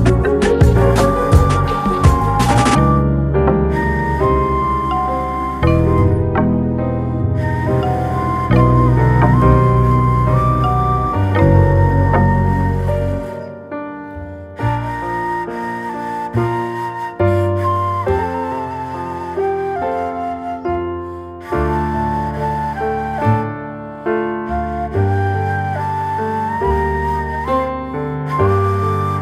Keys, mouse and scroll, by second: 0.1 g, 1.3 scroll up 1, 1.9 s, 3.1 s, 8.8 scroll up 1, 9.0-9.5 shift+middle drag, 9.5-9.9 scroll up 8, 10.3 g, 11.6-12.1 scroll down 12, 12.3-12.7 middle drag, 12.7 scroll down 1, 12.9-13.4 middle drag, 13.4 s, 16.5 scroll up 4, 16.8-17.4 shift+middle drag, 17.4-18.3 scroll up 1, 18.3-20.0 middle drag, 20.0 scroll up 1, 20.2-20.9 middle drag, 20.9 g, 23.3-24.1 middle drag, 24.1 scroll down 3, 24.4-25.8 middle drag, 25.8-26.2 scroll up 1, 26.2-26.6 shift+middle drag, 26.6-27.0 scroll up 1, 27.0 Tab, 27.4 click, 28.1 middle click, 29.1 shift+middle click.